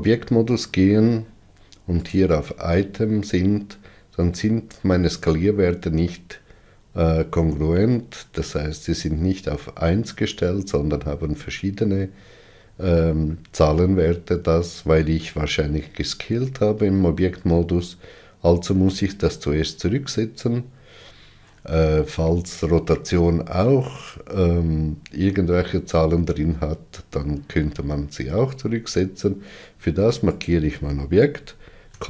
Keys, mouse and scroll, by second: 30.4 click.